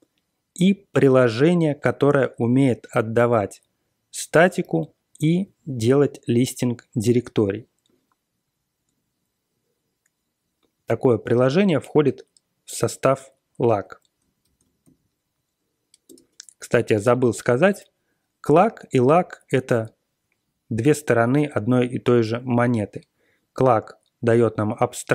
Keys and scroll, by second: 14.3 ctrl+x, 14.7 b, 16.0 Return.